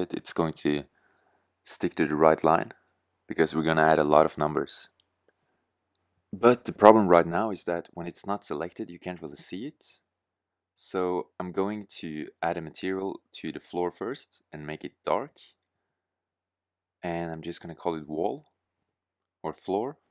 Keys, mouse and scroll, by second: 0.0 middle click, 0.5-1.4 drag, 1.4 middle click, 19.0 BackSpace.